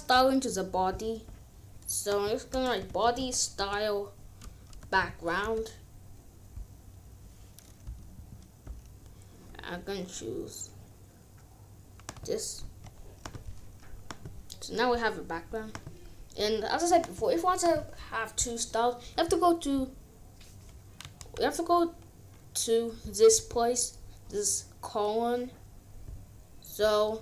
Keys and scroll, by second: 2.5-5.4 typing, 7.8 m, 8.1 a, 12.5 ctrl+s, 21.2 ctrl+z.